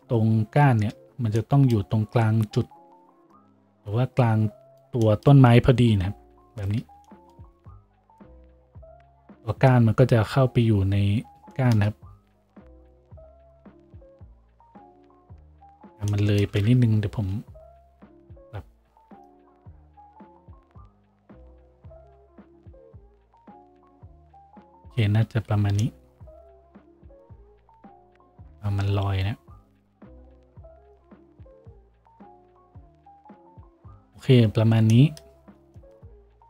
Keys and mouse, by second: 0.0 shift+z, 1.2 shift+z, 7.5 Tab, 11.7-31.5 shift+drag, 17.9 Tab, 24.5 Tab, 27.5 Tab, 28.7 g, 31.5 Tab, 31.5-36.4 middle drag.